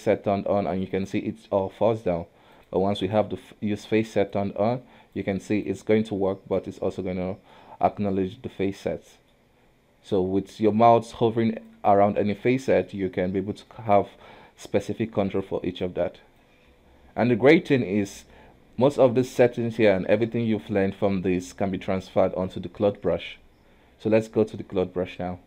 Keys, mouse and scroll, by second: 0.1 click, 1.8 ctrl+z, 2.7 click, 3.2-4.4 middle drag, 4.4 click, 5.8 click, 6.9 scroll down 1, 6.9-9.5 middle drag, 9.5-10.2 scroll up 1, 10.2 click, 12.7-15.9 middle drag, 15.9 click, 16.9-17.3 scroll down 1, 17.3-20.3 middle drag.